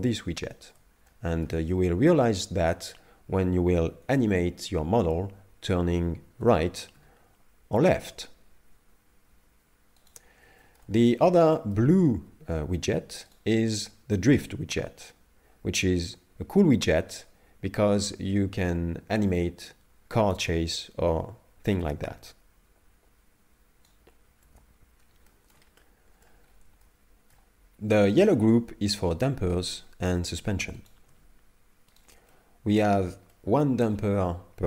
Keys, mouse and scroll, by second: 0.5 shift+middle click, 1.1 middle click, 6.4 r, 10.6 shift+middle click, 11.0 middle click, 11.6 shift+middle click, 13.3 right click, 14.0 scroll down 2, 17.2 right click, 24.5 ctrl+z, 25.3 shift+middle click, 25.8 middle click, 26.5-26.8 scroll up 4, 26.8 shift+middle click, 28.2 right click, 29.7 shift+right click, 30.9 right click, 32.1 right click, 32.3 middle click, 33.0-33.3 scroll up 3, 33.3 shift+middle click.